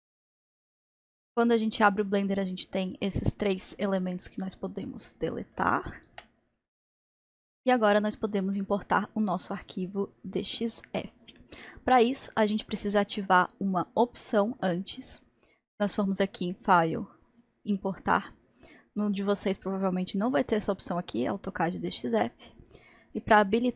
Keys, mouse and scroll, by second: 2.5-3.1 scroll down 1, 3.9 click, 6.0 Delete, 8.5-15.7 middle drag, 15.7-23.7 drag.